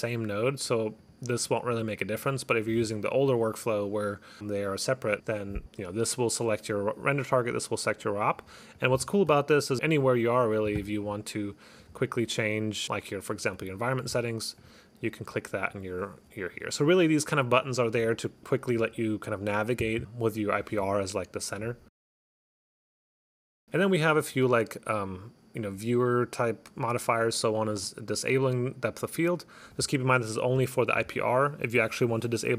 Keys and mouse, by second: 1.1 click, 1.4 click, 1.8 click, 2.2 click, 8.9 click, 9.6 click, 9.9 click, 10.0 click, 13.7 click, 14.7 click, 27.9 click, 29.8 click, 31.9 click.